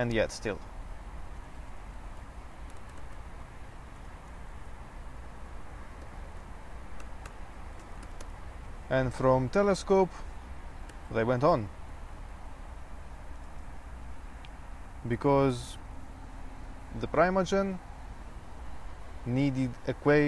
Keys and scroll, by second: 0.5-4.5 typing, 6.0-8.7 typing, 9.9-11.4 typing, 12.5-14.7 typing, 16.3-17.1 typing.